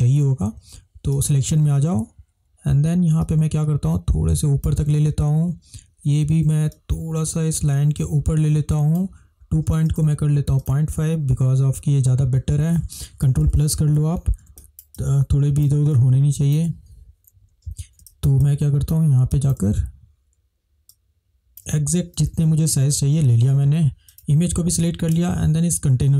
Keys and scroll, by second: 13.4 ctrl+=, 13.6 ctrl+=, 13.8 ctrl+=, 13.9 ctrl+=, 14.0 ctrl+=, 14.7 ctrl+space, 18.1 space, 22.5 ctrl+-, 22.6 ctrl+-, 22.7 ctrl+-, 23.0 ctrl+-.